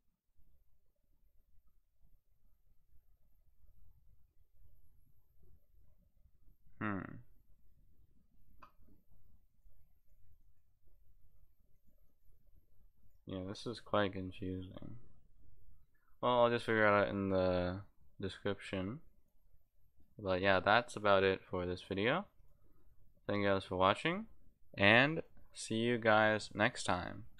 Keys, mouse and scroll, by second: 9.5 click, 10.0 click, 10.4 click, 11.7 click, 12.1 click, 13.0 click, 19.2 click, 19.6 click, 20.0 click, 20.9 click, 21.4 click, 21.7 click, 22.4 click, 22.8 click, 25.1 click.